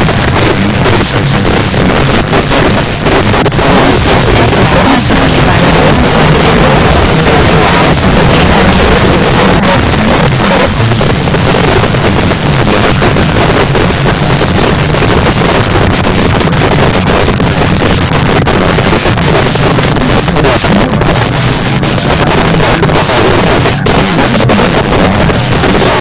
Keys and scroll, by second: 9.6 Page_Down.